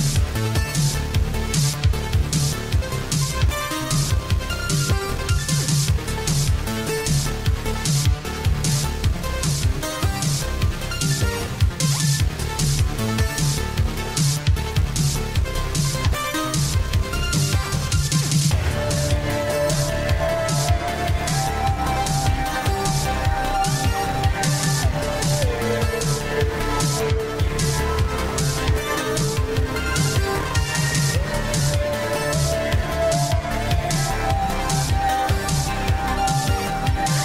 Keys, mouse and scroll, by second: 1.0 click, 9.0 click, 17.6 click, 20.6 right click, 33.2 click, 35.0 right click, 37.0 click.